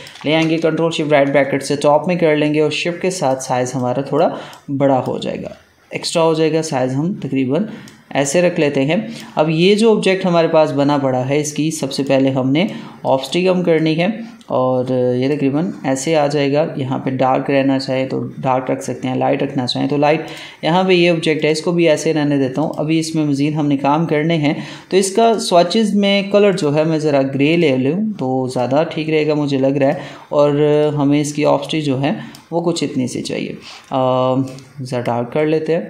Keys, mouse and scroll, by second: 0.8 ctrl+shift+], 2.3-7.7 shift+drag, 7.7-9.5 shift+drag, 11.9-15.9 drag, 20.2 click, 25.1-35.8 drag.